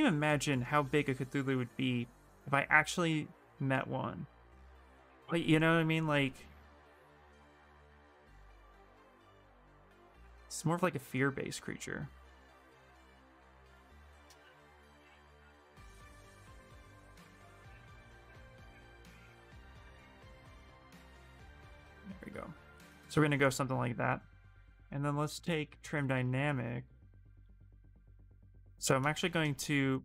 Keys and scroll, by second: 1.0 s, 2.1 s, 24.6-26.7 typing, 28.5 ctrl+z, 28.8 space.